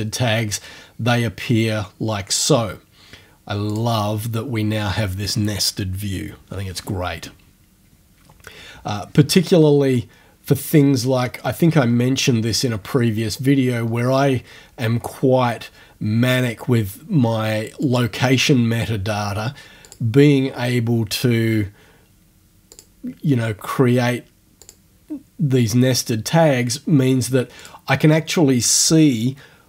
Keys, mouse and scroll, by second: 3.7 click, 9.4 click, 10.7 click, 15.3-16.5 scroll down 1, 17.8 click, 19.9 click, 22.8 click, 24.6 click, 27.6 click.